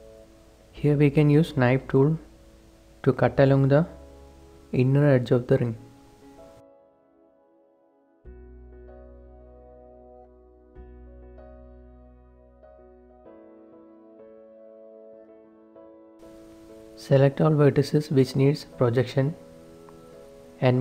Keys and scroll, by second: 0.0 k, 5.8 shift+Return, 6.0 k, 11.0 shift+Return, 11.3 a, 11.9 ctrl+s, 16.3 ctrl+s, 16.3 a.